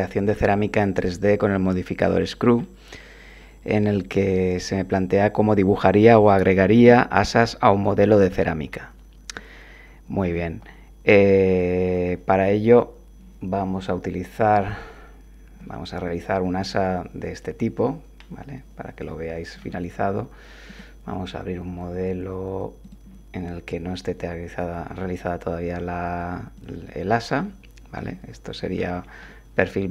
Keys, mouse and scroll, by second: 2.5 scroll down 1, 3.1 scroll down 1, 8.7 scroll down 1, 9.3 scroll down 1, 11.5 click, 14.6 click, 16.0-19.7 drag, 20.7 click, 22.8 click, 26.5 click, 27.3-28.9 drag, 29.3-29.9 drag.